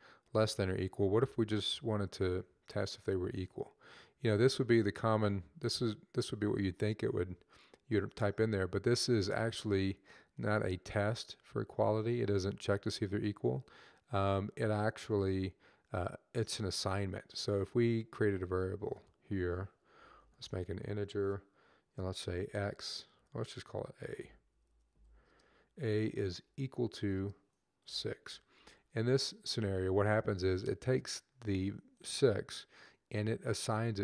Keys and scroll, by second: 19.5-20.7 typing, 21.9-22.9 typing, 24.0-24.7 typing, 26.3 typing, 27.6-28.1 typing.